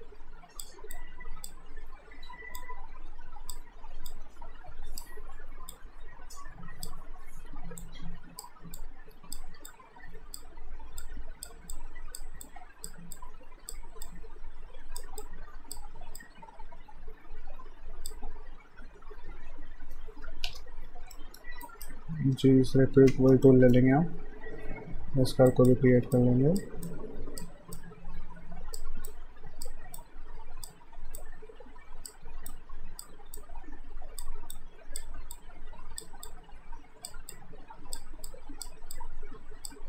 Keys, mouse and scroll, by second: 8.8 click, 20.5 Return, 21.2 alt+middle click, 21.6 alt+right click, 22.9 g, 23.5 alt+middle click, 25.5 click, 36.3 click.